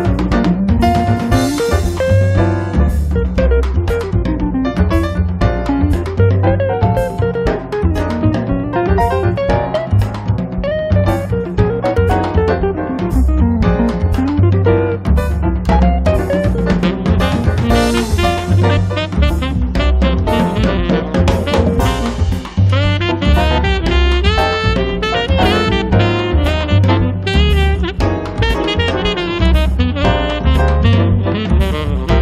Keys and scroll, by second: 0.2 p, 1.3 4, 1.5 Return, 3.5 space, 10.6 l, 12.3 7, 12.6 2, 12.9 Return, 15.2-16.9 typing, 17.3 Return, 18.5 4, 18.7 Return, 20.1-21.1 typing, 23.0 4, 23.2 Return, 24.1 2, 24.3 Return, 27.8 p, 31.4 l.